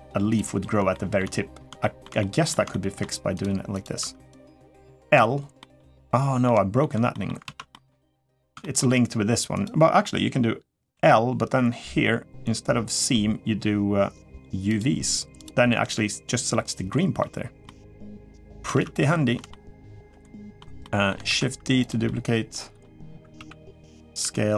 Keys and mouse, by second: 0.7 shift+middle drag, 1.6 shift+middle drag, 2.0 middle drag, 2.5-2.8 shift+middle drag, 3.2 drag, 3.8 Tab, 4.1 click, 4.8 l, 5.4 middle click, 6.2 middle click, 6.9 middle click, 7.2 alt+z, 7.5 middle click, 8.4 middle click, 9.4 click, 10.7 l, 14.5 click, 15.2 click, 15.6 l, 16.7 middle click, 17.4 middle click, 18.5 alt+z, 18.9 middle click, 19.3 middle click, 20.0 shift+middle click, 20.6 middle click, 21.0 shift+d, 21.8 middle click, 23.1 s, 24.0 r.